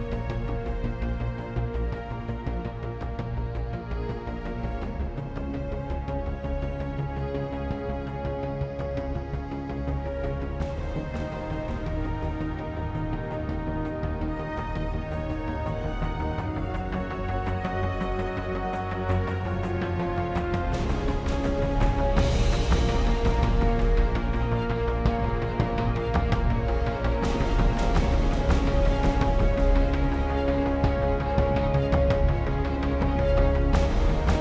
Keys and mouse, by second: 0.1 shift+z, 3.8 click, 4.6 shift+a, 19.0 g, 24.5 z, 25.1-26.2 drag, 26.5 shift+z, 29.1-34.4 drag.